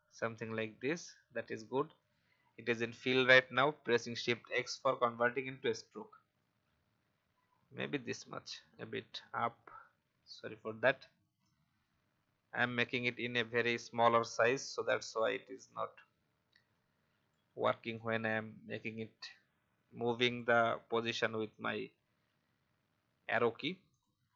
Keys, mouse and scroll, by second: 2.0 click, 6.1-8.6 scroll down 1, 8.6 Up, 10.5-17.8 drag, 17.9-20.3 alt+drag, 21.5-24.3 drag.